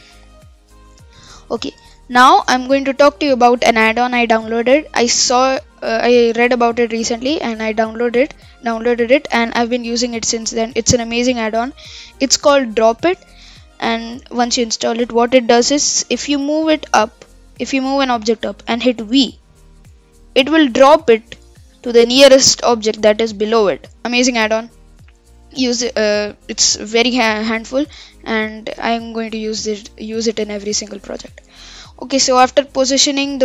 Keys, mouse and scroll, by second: 0.1 KP_3, 0.8-1.5 scroll up 5, 1.5-4.7 shift+middle drag, 16.0 g, 19.2 v, 20.2-21.6 scroll up 5, 21.6-22.4 scroll down 10, 22.4-22.8 middle drag, 22.8-23.2 scroll down 2, 23.2-23.7 middle drag, 23.7-24.0 scroll up 4, 24.0-24.3 scroll down 7, 24.3-27.5 middle drag, 27.5-27.8 scroll up 4, 27.8-30.8 middle drag, 31.2-31.6 scroll down 4, 31.6-33.4 middle drag.